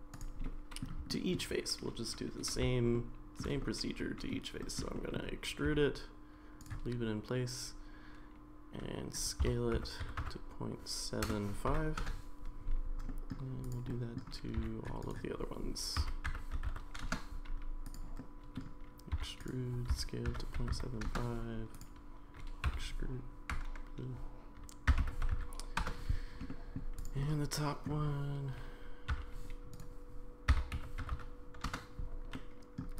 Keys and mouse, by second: 0.4 middle click, 1.1 shift+middle click, 2.9 shift+middle click, 3.6 middle click, 4.6 middle click, 4.9 middle click, 5.7 e, 9.4 s, 13.1 middle click, 13.7 click, 13.9 middle click, 14.6 e, 16.0 s, 17.8 click, 18.2 middle click, 19.1 e, 19.9 s, 22.6 e, 24.9 s, 26.5 middle click, 27.0 click, 27.2 middle click, 29.1 e, 30.5 s, 32.3 middle click.